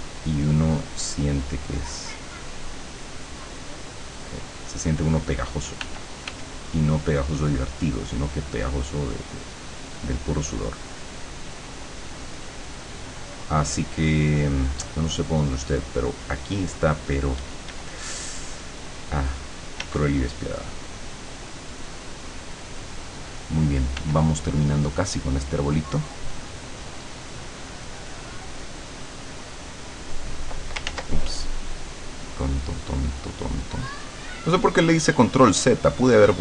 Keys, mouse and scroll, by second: 0.0-5.0 drag, 5.8 f, 6.6-13.4 drag, 14.0-17.6 drag, 17.4 d, 17.8-19.9 drag, 19.8 d, 20.0-23.2 drag, 24.0 f, 25.7 click, 30.9 ctrl+z, 31.2-36.4 ctrl+drag.